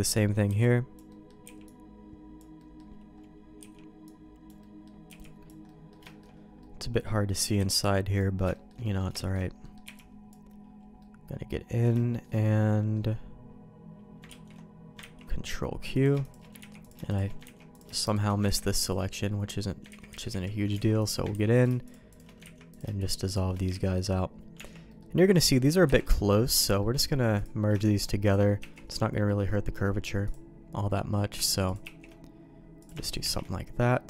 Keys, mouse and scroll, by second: 0.4 b, 1.0 middle click, 1.4 b, 2.5 middle click, 3.5 b, 4.5 middle click, 5.0 b, 5.6 middle click, 6.0 shift+middle click, 6.6 middle click, 7.5 b, 8.5 shift+middle click, 8.8 middle click, 9.1 shift+middle click, 9.6 middle click, 9.8 b, 10.9 middle click, 11.9 shift+middle click, 12.4 middle click, 14.2 ctrl+q, 15.0 ctrl+x, 15.9 click, 16.2 shift+click, 16.5 ctrl+x, 16.8 click, 17.0 shift+click, 17.5 ctrl+x, 17.7 click, 18.0 shift+click, 18.5 ctrl+x, 18.7 click, 19.8 ctrl+z, 20.0 ctrl+z, 20.2 ctrl+z, 20.7 alt+a, 20.9 click, 21.3 ctrl+x, 21.8 shift+click, 22.5 ctrl+x, 22.7 click, 22.9 shift+click, 23.7 ctrl+x, 24.5 Tab, 24.8 middle click, 25.3 click, 25.8 KP_Decimal, 26.7 middle click, 27.3 click, 28.2 shift+click, 28.6 shift+1, 29.1 middle click, 30.2-31.3 drag, 31.6 shift+click, 31.8 shift+1, 32.7 shift+click, 33.2 shift+1, 33.9 middle click.